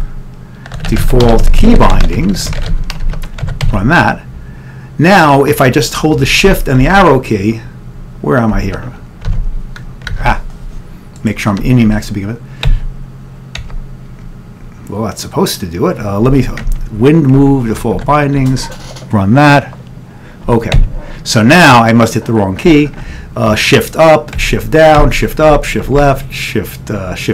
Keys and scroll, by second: 0.0-4.2 typing, 6.0-6.7 typing, 7.0 Up, 8.6 Right, 9.4 alt+Tab, 10.2 alt+Tab, 13.6 Up, 13.6 Down, 16.4 Right, 17.2 Right, 18.0 ctrl+x, 18.4 ctrl+e, 24.5 Down, 25.0 Up, 25.6 Left, 26.0 Down.